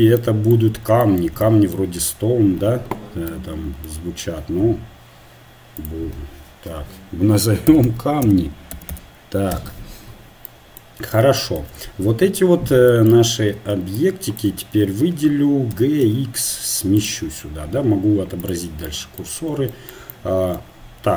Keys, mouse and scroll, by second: 13.2 a, 14.4-15.8 drag, 15.7 g, 18.4-21.1 drag.